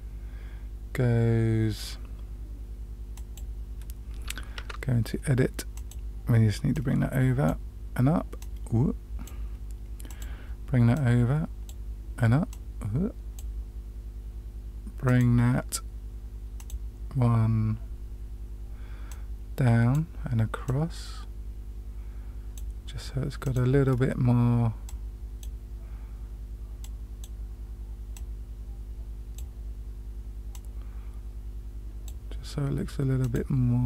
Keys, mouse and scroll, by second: 4.5 Tab, 5.7 click, 6.7-7.4 drag, 8.3-9.3 drag, 10.0 click, 10.9-11.7 drag, 12.4-13.4 drag, 15.0 click, 16.5 click, 19.0-19.9 drag, 20.6-22.6 drag, 23.4 click, 24.8-25.4 drag, 26.8 click, 28.1-29.3 drag, 30.5-32.1 drag, 33.2 click.